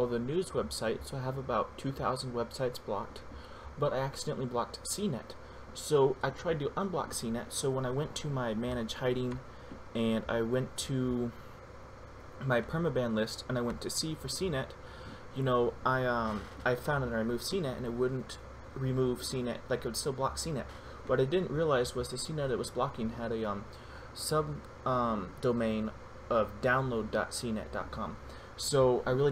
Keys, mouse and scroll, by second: 9.6 click, 23.0 click.